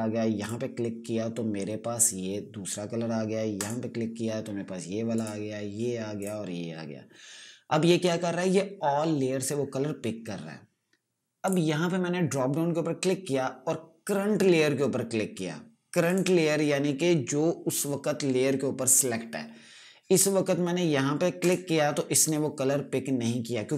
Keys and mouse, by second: 0.9 click, 4.1 click, 12.0 click, 16.6 click, 21.9 click.